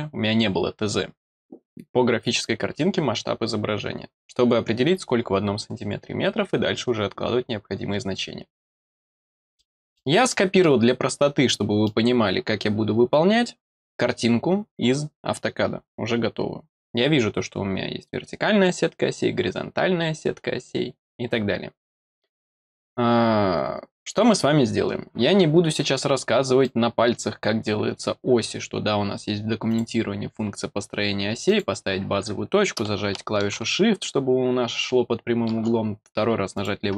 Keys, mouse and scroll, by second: 9.5 middle click, 10.2 middle click, 11.0 middle click, 11.4 middle click, 26.1 middle click, 29.6 click, 31.4 click, 36.5 click.